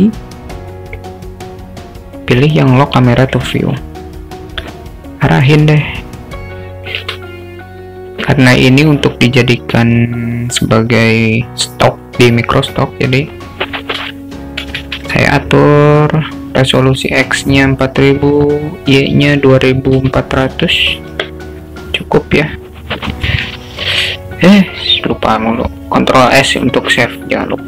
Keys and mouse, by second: 5.7-6.9 alt+shift+middle drag, 8.8 click, 12.7-21.4 drag, 14.8 0, 15.0 0, 20.6 0, 23.3 ctrl+s.